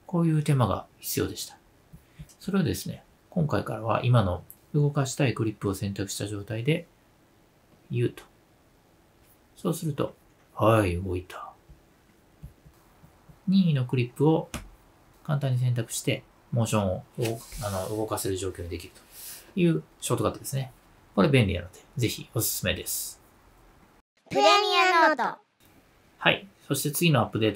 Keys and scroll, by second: 6.6 space, 7.7 u.